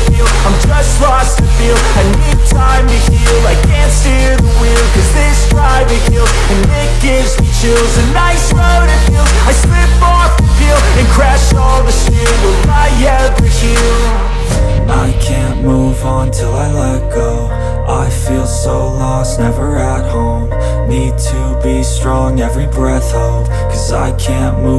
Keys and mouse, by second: 7.4 s, 8.0 middle click, 8.3-10.9 drag, 10.9-12.0 middle drag, 12.0-14.6 drag, 14.6-15.6 middle drag, 15.6-17.6 drag, 17.6-24.7 middle drag, 24.0 click, 24.4 s.